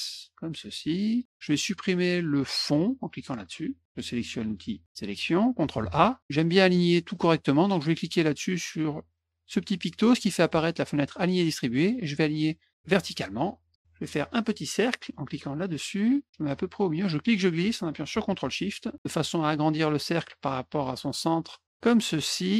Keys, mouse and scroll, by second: 2.8 click, 5.0 click, 5.8 ctrl+a, 10.2 click, 13.2 click, 15.6 click, 17.0-22.5 drag.